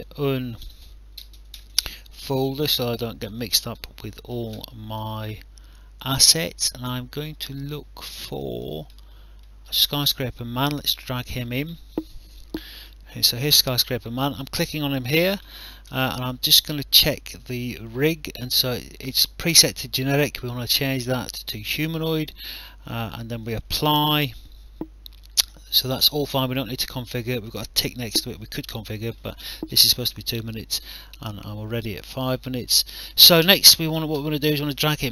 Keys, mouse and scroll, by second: 0.6-2.1 typing, 2.5 click, 8.4 click, 10.4 click, 13.2 click, 20.7 click, 23.4 click, 34.6 click.